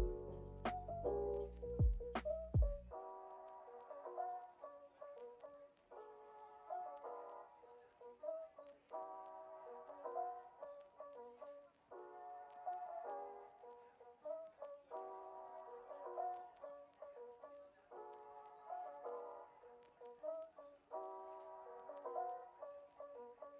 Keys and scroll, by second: 0.4 super+d, 3.0 super+[, 7.4 x, 11.2 Delete, 17.3 shift+[, 20.3 x, 22.0 o.